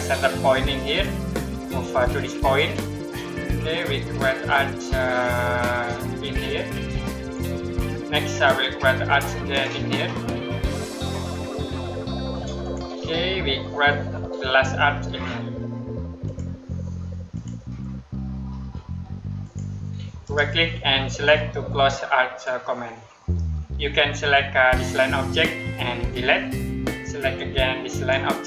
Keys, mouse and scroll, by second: 0.8 click, 7.1 click, 16.1 click, 20.1 right click, 21.1 click, 26.0 Delete, 27.2 click.